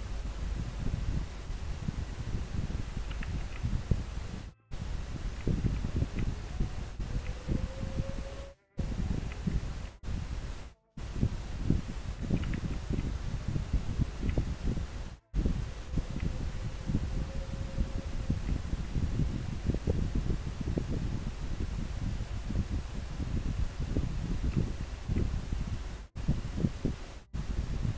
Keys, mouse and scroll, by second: 3.9 scroll up 1, 5.5 scroll down 1, 7.3 scroll up 1, 13.2 scroll up 1, 14.4 scroll down 1, 16.2 scroll up 1, 18.5 scroll down 1.